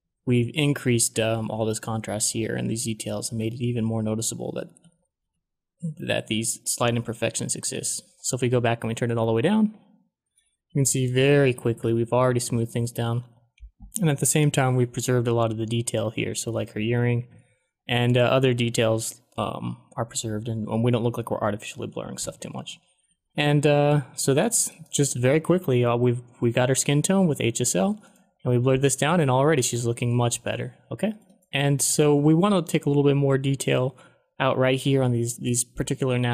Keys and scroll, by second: 0.2 shift+f, 3.6 ctrl+d, 4.0 ctrl+d, 7.5 shift+f, 11.5 shift+f, 14.6 ctrl+d, 15.2 ctrl+d, 16.3 ctrl+d, 16.8 ctrl+d, 21.7 ctrl+d, 22.0 ctrl+d, 22.3-24.0 typing, 29.9 ctrl+d, 30.2 ctrl+d.